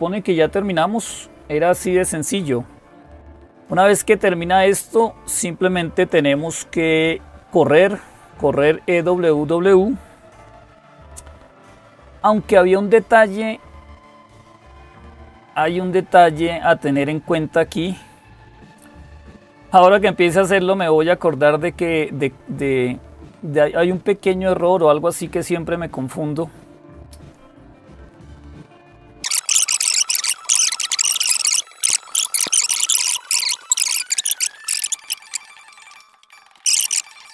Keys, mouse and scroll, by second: 8.4-9.5 drag, 10.8 ctrl++, 11.3 ctrl++, 13.8 click, 14.7 ctrl++, 34.6 click, 35.1-35.6 scroll down 1, 35.6 click.